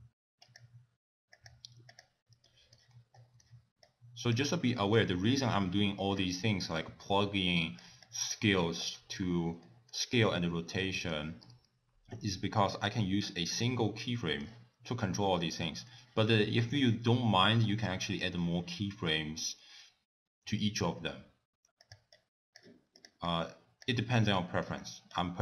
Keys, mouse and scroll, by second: 0.4 click, 1.3 click, 2.0 click, 2.4 middle click, 3.2 middle click, 3.8 click, 5.3 ctrl+s, 6.5 middle click, 7.5 click, 8.0 click, 8.5 middle click, 9.6 middle click, 10.8 middle click, 12.8 click, 13.6 middle click, 17.2 middle click, 17.6-18.0 scroll up 3, 18.1 middle click, 21.8 click, 22.2 click, 23.0 click, 23.3 click, 24.3 middle click, 25.2 click.